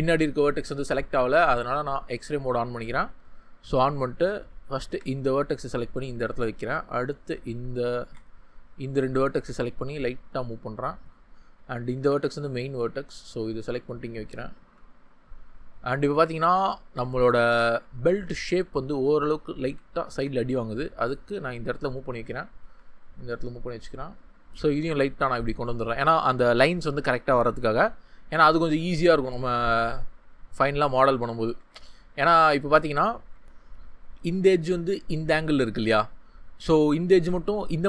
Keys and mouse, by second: 0.7 ctrl+z, 4.8 g, 6.1-7.6 drag, 8.0 ctrl+z, 9.3 g, 10.1 click, 11.9 g, 13.0 click, 15.8 ctrl+z, 20.1 g, 21.2 click, 22.1 ctrl+z, 22.6 g, 23.3 click, 33.4 Tab.